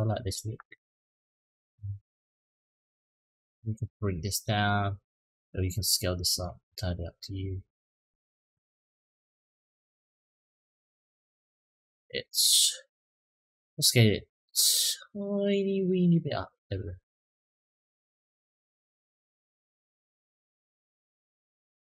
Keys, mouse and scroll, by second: 0.0 click, 0.9-2.8 drag, 3.1 click, 4.0-4.4 middle drag, 4.9-6.2 middle drag, 6.9-7.8 middle drag, 8.2 click, 13.2 click, 14.2 click, 14.4-15.6 drag, 16.5 click, 17.3-20.7 drag, 21.2-21.9 middle drag.